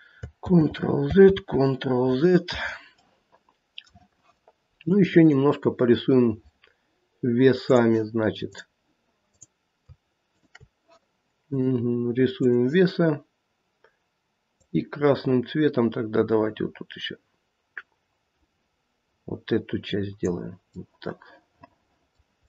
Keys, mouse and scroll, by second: 0.4 ctrl+z, 1.3 ctrl+z, 3.0 middle click, 5.1 click, 8.4 click, 9.3 click, 10.3 shift+click, 10.5 shift+click, 11.5 click, 15.2 click, 20.8 middle click, 21.0 middle click, 22.0 middle click.